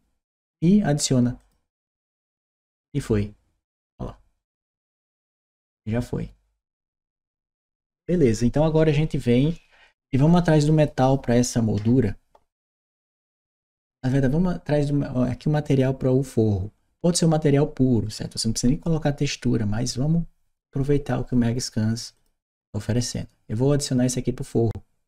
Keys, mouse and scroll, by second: 1.2 click, 15.4 click, 21.9 click.